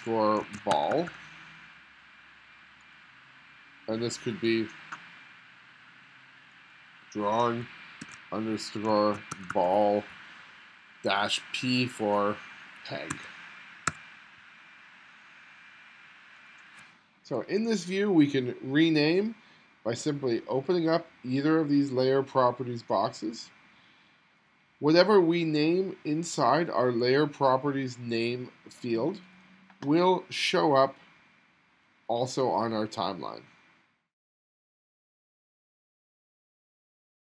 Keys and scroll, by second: 0.0-1.4 typing, 8.1-10.0 typing, 13.2 e, 14.0 g.